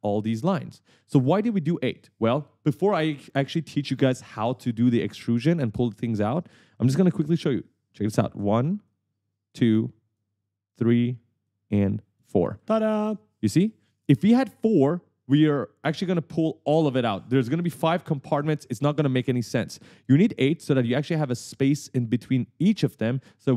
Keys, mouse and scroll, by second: 0.0-2.4 typing, 6.4 right click, 6.5 w, 6.9 a, 7.8 shift+click, 9.0 shift+click, 10.3 shift+click, 11.6 shift+click, 12.6 right click, 12.7-14.4 typing, 20.5 right click, 20.7 a.